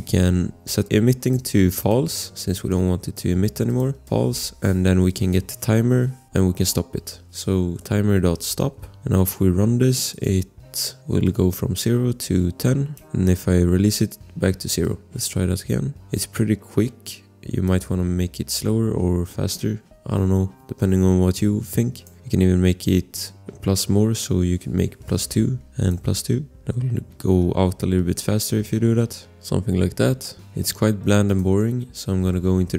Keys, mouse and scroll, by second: 0.8 click, 1.4 ctrl+c, 1.8 click, 2.0 ctrl+v, 2.7 click, 4.1 e, 4.9 Return, 6.6 click, 7.5-9.1 typing, 10.1 click, 11.2 click, 21.9 click, 25.1 2, 25.5 click, 26.0 2, 26.7 click.